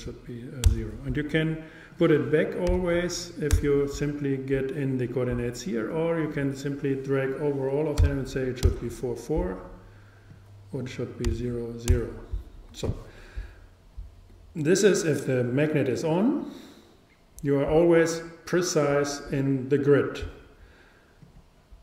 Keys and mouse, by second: 0.3 click, 2.0-3.7 drag, 5.9-7.7 drag, 10.3-12.2 drag, 21.2-21.8 drag.